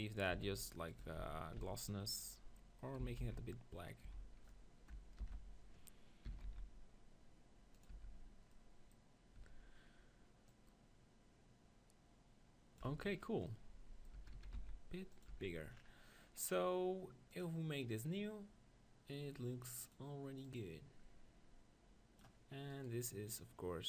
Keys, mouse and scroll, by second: 0.0-1.6 typing, 0.5-2.2 drag, 1.0 Tab, 3.0 s, 4.0-5.5 right drag, 4.1 Tab, 5.2 ctrl+l, 5.5 click, 6.4 s, 7.8-9.8 drag, 7.9 Tab, 9.4 Tab, 9.8 middle click, 10.5-12.3 drag, 12.8 Tab, 14.1 Tab, 14.4 s, 15.3-22.4 drag, 15.5 Tab, 22.7-23.8 right drag.